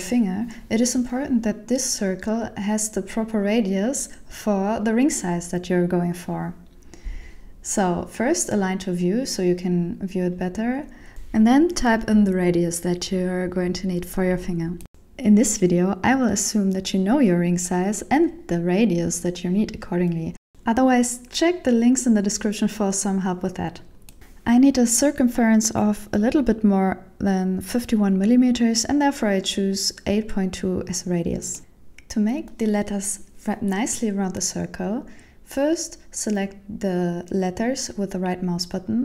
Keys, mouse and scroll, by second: 5.1 click, 14.5 click, 29.0 shift+middle click, 30.8 right click, 32.1 shift+middle click, 38.6 click.